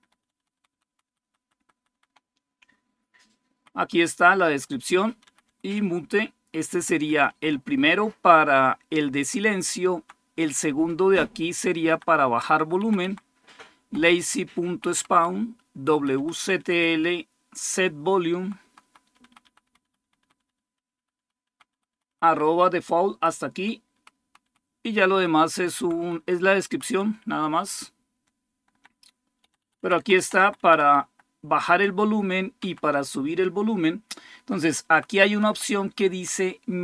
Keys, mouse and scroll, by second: 0.0 Right, 0.4 Right, 0.5 Right, 0.9 Right, 1.0 Right, 1.2 Right, 1.4 Right, 1.5 Right, 1.7 Right, 3.6 Right, 3.9 Right, 5.3 Right, 5.6 Left, 6.2 Left, 6.3 Left, 6.5 Left, 6.6 Left, 6.6 Left, 6.9 Left, 7.1 Left, 7.3 Left, 8.0 Left, 8.0 Left, 8.2 Left, 8.2-9.2 Left, 9.7 End, 10.5 BackSpace, 11.1 Left, 11.3 Left, 11.3 Left, 11.4 Left, 11.6 Left, 11.8 Left, 12.6 Left, 12.8 Left, 13.6 Right, 13.9 Right, 14.1 Right, 14.3 Right, 14.5 Right, 14.9 Right, 15.7 Right, 16.0 Right, 16.2 Right, 16.4 Right, 16.6-17.7 Right, 17.9 Right, 18.0 Right, 18.2 Right, 18.2 Right, 18.4 Right, 18.8 Right, 19.0 Right, 19.2 Right, 19.6 Right, 19.8 Right, 20.0 Right, 20.2 Right, 20.4 Right, 20.6 Right, 20.8 Right, 21.0 Right, 21.2 Right, 21.5 Right, 21.7 Right, 21.9 Right, 22.6 Right, 22.9 Right, 23.7 Right, 24.0 Right, 24.3 Right, 24.7 Right, 24.9 Right, 25.2 Right, 25.6 Right, 25.8 Right, 26.0 Right, 26.3 Right, 26.5 Right, 26.7 Right, 27.3 BackSpace, 27.9-28.6 Left, 29.2 Left, 29.4 Left, 29.6 Left, 29.8 Left, 30.2 Left, 30.4 Left, 30.8 Left, 32.4 Down, 34.2 Up, 34.7 Right, 34.9 Right, 35.1 Right, 35.3 Right, 35.5 Right, 35.9 Right.